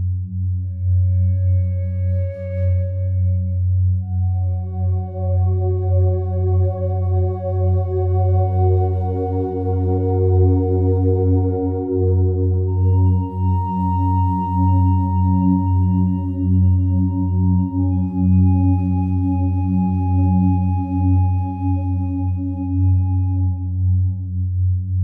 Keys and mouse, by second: 0.7 click, 2.2 F3, 3.0-3.8 typing, 5.0 click, 6.1 Tab, 6.9-9.1 typing, 10.3 click, 11.6 Tab, 13.4 KP_Divide, 15.0-17.2 ctrl+alt+drag, 17.7-18.6 drag, 21.2 i, 22.4 click, 24.3 click.